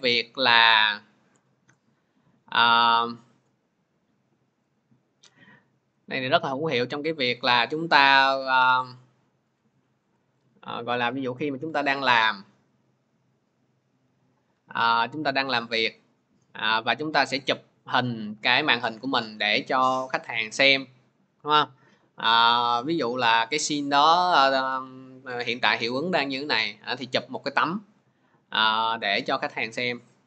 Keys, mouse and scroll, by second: 2.4 click, 7.5 ctrl+z, 9.6 click, 10.0 Delete, 14.6 click, 17.3-22.4 drag.